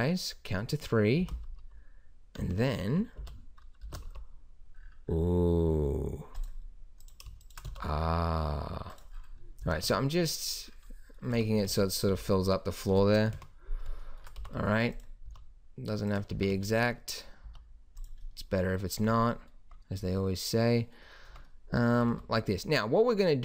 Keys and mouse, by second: 1.2 s, 3.2 o, 3.8 s, 7.6 s, 9.6 s, 11.3 Tab, 11.7 middle drag, 11.7 z, 12.1 z, 13.3 KP_1, 14.4 g, 15.3 s, 16.3 g, 17.4 s, 19.0 Tab, 19.6 Tab, 21.3 Tab, 22.0 a, 22.1 a.